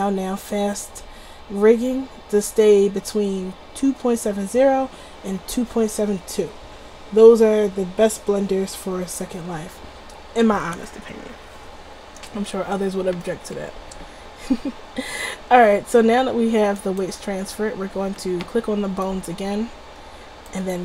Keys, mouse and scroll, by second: 13.8-14.7 middle drag, 14.9 middle drag, 15.0-17.0 middle drag, 17.0-19.1 drag, 20.7 click, 20.7 typing.